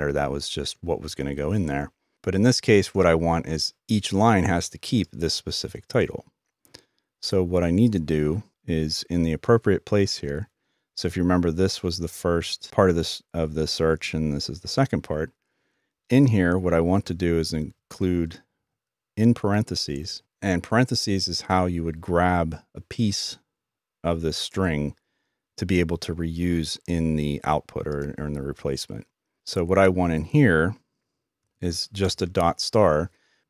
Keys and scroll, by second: 16.9-17.6 typing, 31.4-32.2 typing.